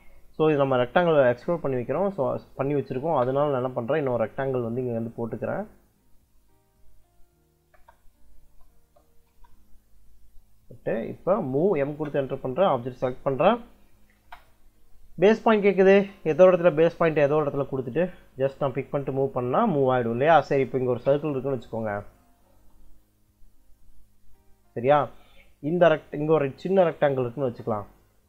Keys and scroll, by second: 1.1 Escape, 1.6-2.9 typing, 7.5-9.2 typing, 11.5 m, 11.7 space, 14.0 space, 20.7 c, 20.9 space, 22.3 space, 26.4 r, 26.7 e, 27.3 space.